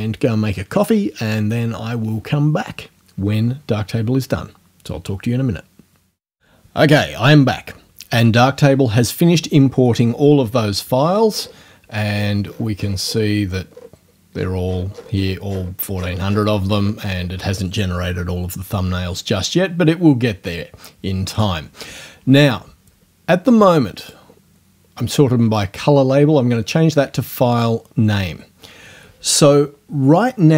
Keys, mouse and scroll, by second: 11.0-11.3 ctrl+scroll down 2, 12.1-13.3 ctrl+scroll down 5, 13.7-15.4 scroll down 4, 15.5-16.6 scroll down 4, 16.8 scroll up 2, 20.5-21.6 drag, 24.0 click, 27.6 click.